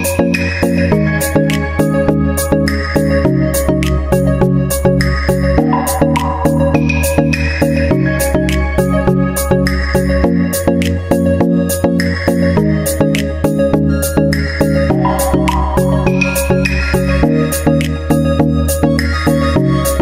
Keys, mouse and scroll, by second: 0.0-1.0 drag, 0.2 Tab, 1.4-2.5 drag, 2.5 middle click, 3.2-4.2 drag, 4.2 middle click, 4.3-5.3 drag, 6.3-7.9 middle drag, 7.9-9.0 drag, 9.2 click, 10.5-11.5 drag, 12.3-17.9 drag, 17.9 BackSpace.